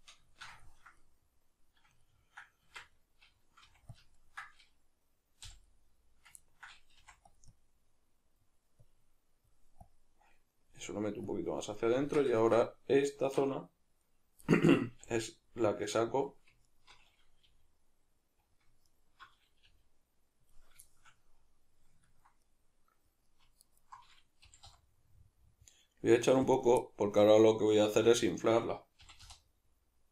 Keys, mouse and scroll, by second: 0.0-7.6 middle drag, 2.6 Tab, 3.6 f, 4.0 ctrl+click, 5.4 g, 7.0 f, 7.6-11.8 drag, 11.8-13.1 middle drag, 12.0 Tab, 13.1-14.5 right drag, 14.5 middle click, 15.0 g, 16.2 click, 16.7 alt+right click, 17.5 g, 18.5 click, 18.9 alt+right click, 19.6 g, 20.5 click, 20.9-23.6 shift+middle drag, 23.6 alt+right click, 24.4 g, 26.6 click, 26.8-28.2 middle drag, 28.0 1, 28.2 right click, 29.0 g.